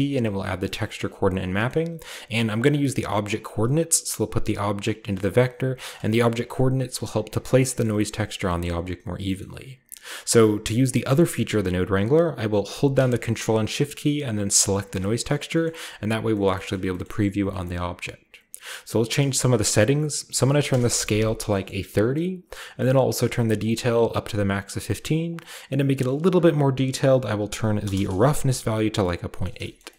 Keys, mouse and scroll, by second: 0.0-0.6 middle drag, 0.1 a, 0.8-1.4 ctrl+middle drag, 0.9-2.7 ctrl+scroll up 1, 1.3-4.6 drag, 1.7-4.3 middle drag, 2.7-4.3 scroll up 1, 4.9-5.3 drag, 5.5 click, 5.5 g, 5.9-7.6 drag, 7.8 middle click, 8.6-9.3 middle drag, 8.8-9.4 scroll down 1, 9.4-10.9 middle drag, 9.4-10.6 scroll up 1, 10.6-10.9 scroll up 1, 11.1-12.7 middle drag, 14.6-15.7 ctrl+shift+drag, 15.5 middle click, 17.7-19.0 scroll up 2, 19.1-20.2 drag, 19.1 typing, 20.2-21.2 typing, 21.3-23.6 scroll down 1, 21.5-23.6 middle drag, 24.2-27.4 drag, 25.1 typing, 27.5 BackSpace, 27.7 8, 27.8 Return, 28.8-29.9 scroll down 4, 29.0 middle click.